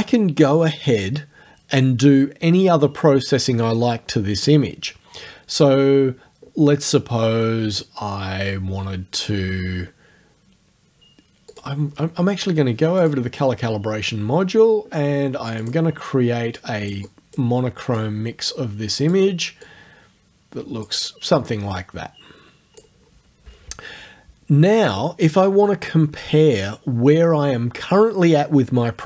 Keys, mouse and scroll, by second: 11.5 click, 13.0 click, 15.6 click, 16.6 click, 18.0 click, 19.7-21.0 drag, 21.8 click.